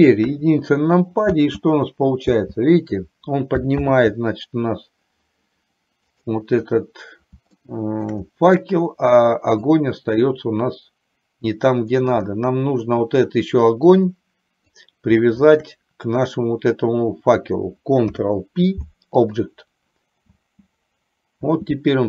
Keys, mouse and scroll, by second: 0.0 click, 0.4 KP_1, 1.5 space, 2.5 space, 4.0 ctrl+z, 6.5 click, 7.8 shift+middle click, 10.0-12.1 drag, 14.0-15.0 drag, 15.5 shift+click, 18.1 ctrl+p, 20.5 space, 21.6 space.